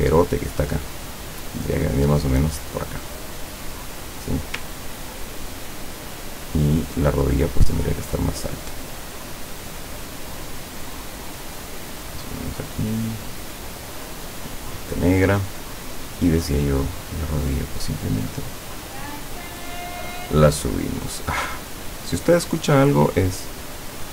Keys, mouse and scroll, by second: 0.4 shift+click, 1.1-4.3 shift+drag, 4.9 ctrl+scroll down 2, 5.2 ctrl+scroll up 2, 6.2-6.8 ctrl+scroll up 4, 7.7-9.1 drag, 9.5 click, 10.4-12.4 drag, 12.9 click, 14.0-15.3 drag, 16.2 click, 16.9-20.4 drag, 21.2 click, 23.5-24.1 drag.